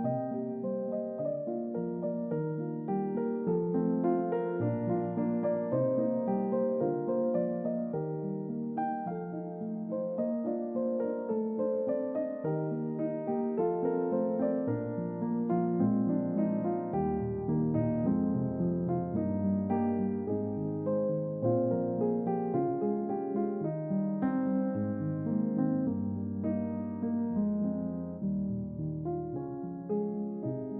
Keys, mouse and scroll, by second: 1.4-2.4 middle drag, 3.4-4.4 drag, 5.2-10.8 middle drag, 10.9 click, 13.0-14.5 drag, 14.9 click, 16.0 typing, 21.0 click, 22.1 click, 22.9-23.8 drag, 24.5-25.5 drag, 26.1 click, 27.9-29.1 drag.